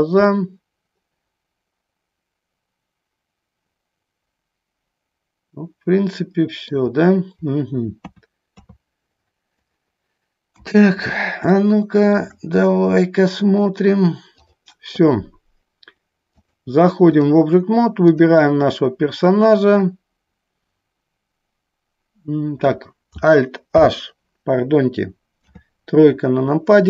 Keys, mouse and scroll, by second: 0.5-7.0 middle drag, 8.2 KP_2, 11.8 shift+middle click, 14.6 click, 16.6 click, 18.3 click, 23.9 alt+h, 25.5 KP_3.